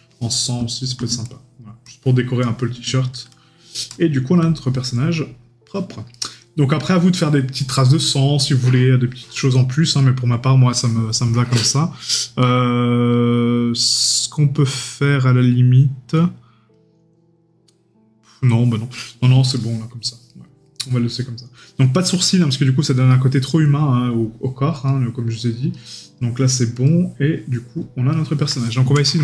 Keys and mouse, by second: 4.6 right click, 5.8 middle click, 6.1 right click, 10.0 right click, 19.5 right click, 23.1 right click, 23.8 middle click, 28.1 right click.